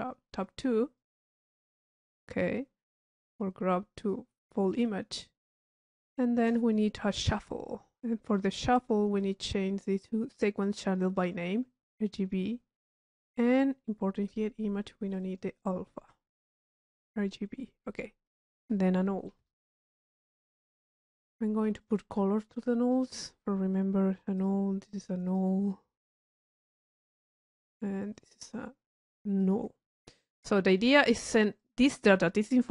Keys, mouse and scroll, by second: 0.3 click, 3.3 click, 4.0 click, 4.7 click, 6.0-6.7 drag, 8.0 click, 8.4 click, 8.8-9.9 drag, 11.2 click, 11.7 middle click, 13.5 click, 14.3 click, 15.1 drag, 18.3-19.0 drag, 19.3 click, 19.5 u, 20.3 click, 20.9 click, 21.8 click, 22.8 click, 23.3 middle click, 24.4 click, 25.3 click, 27.0-28.6 drag, 29.4 click, 30.0 click, 30.7 right click, 31.6 click.